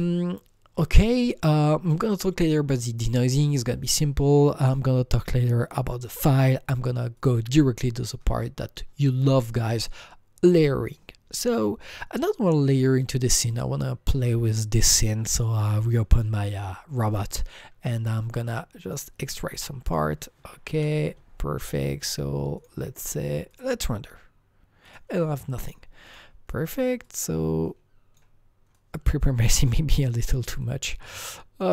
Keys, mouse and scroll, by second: 4.6 click, 7.3 click, 13.5 click, 13.5 click, 14.9 click, 16.2 click, 17.1 click, 18.8 click, 19.9 click, 20.7 Delete, 21.6 click, 22.6 click, 23.5 click, 24.8 click, 26.1 click, 27.0-31.7 drag.